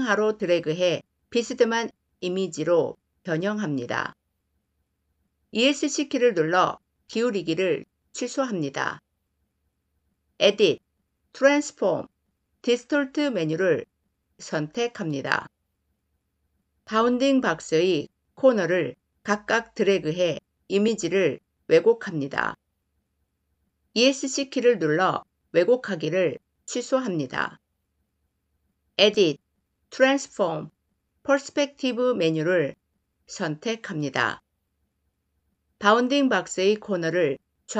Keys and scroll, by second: 5.4 Escape, 23.8 Escape.